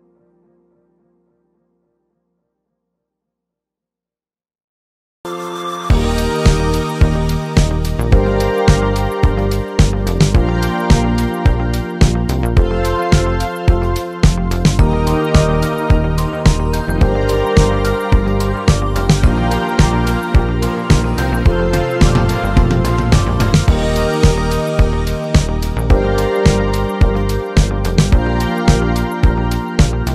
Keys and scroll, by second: 7.3 Up, 8.1 Right, 8.3 Down, 9.4 Up, 12.3 Up, 15.1 Delete, 26.2 ctrl+z.